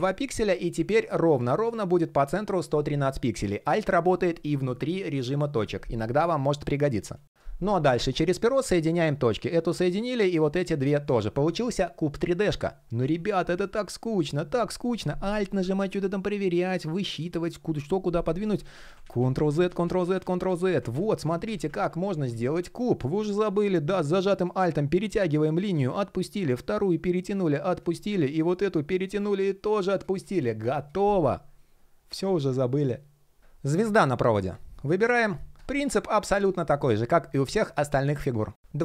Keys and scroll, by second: 18.4 super+z, 19.8 super+z, 33.4 super+\.